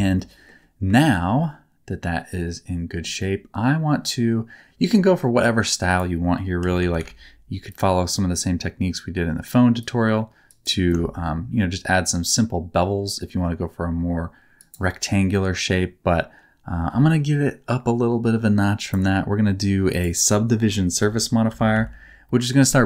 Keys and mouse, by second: 0.1 middle click, 1.0 shift+middle click, 1.4-2.4 middle drag, 3.1-4.8 middle drag, 5.0 middle click, 6.0-7.7 drag, 8.1 middle click, 9.8 click, 10.8-14.6 shift+drag, 18.7 click, 19.9-22.8 drag.